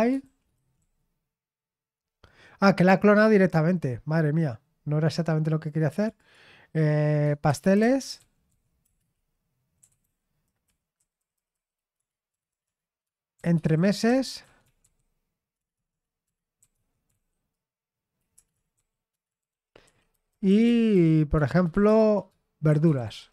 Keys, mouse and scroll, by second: 0.0-1.3 typing, 3.0 click, 5.9 click, 7.3-10.5 typing, 10.6 Down, 10.9 Left, 11.1 Left, 11.3 Left, 11.5 Left, 11.9-19.9 typing, 20.1 Down, 20.4 Left, 21.1-23.3 typing.